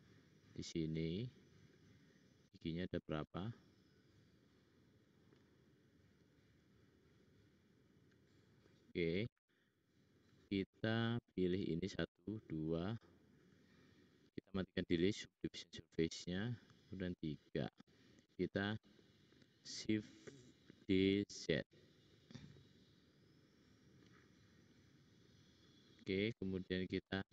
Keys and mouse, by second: 1.6 click, 2.0-4.4 middle drag, 11.6 shift+click, 12.0-13.4 shift+drag, 15.6 middle click, 17.0 shift+click, 20.6 shift+d, 25.4-26.8 middle drag.